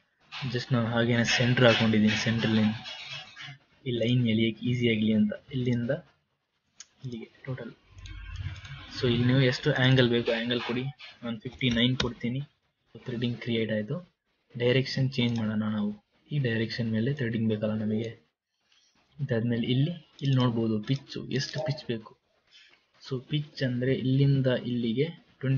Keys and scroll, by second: 11.7 KP_5, 11.9 KP_9, 12.3 KP_Decimal.